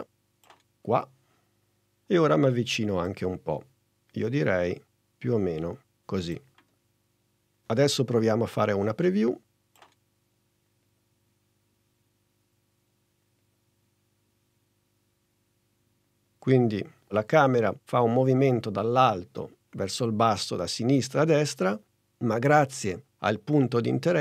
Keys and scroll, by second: 9.7 space.